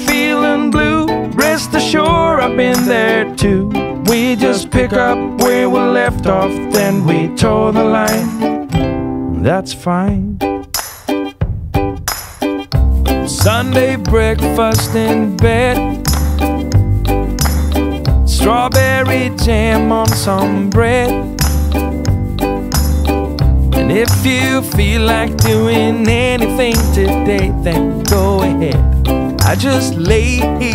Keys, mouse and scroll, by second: 5.4 click, 8.5 click, 9.6 click, 12.1-15.0 typing, 16.1 click, 18.4 click, 24.9 click, 26.8 click, 29.6 click.